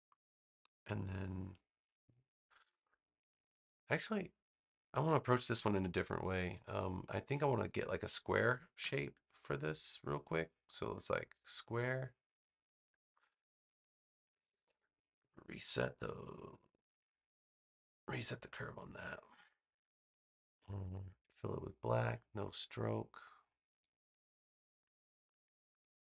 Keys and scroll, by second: 5.4 BackSpace, 8.7 v.